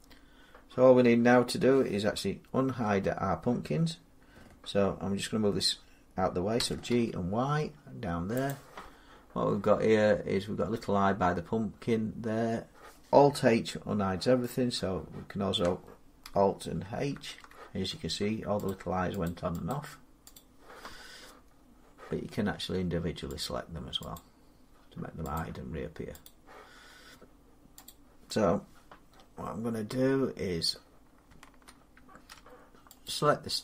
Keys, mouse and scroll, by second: 6.4 g, 6.7 y, 8.3-11.9 drag, 16.1 click, 17.0 alt+h, 18.5 click, 19.1 click, 19.5 click, 20.2 click, 21.3 middle click, 21.5 middle click, 23.3 click, 24.0 click, 25.2 click, 26.1 click, 26.8 middle click, 27.7 click, 29.0 scroll, 30.1-30.5 scroll, 32.9 shift+click, 33.3 middle click.